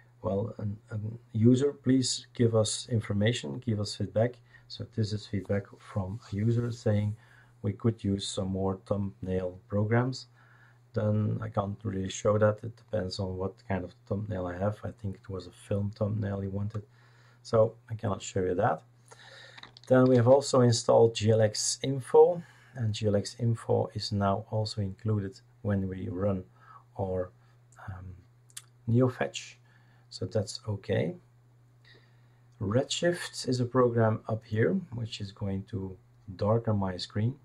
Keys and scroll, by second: 20.0 ctrl+alt+t.